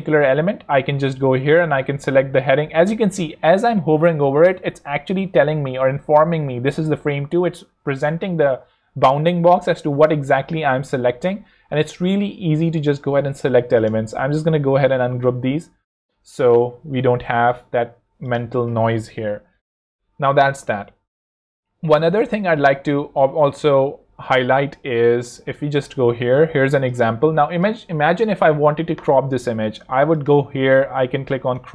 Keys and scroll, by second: 13.0 ⟲, 14.1 shift+super+g, 16.7 alt+l, 18.5 shift+super+g.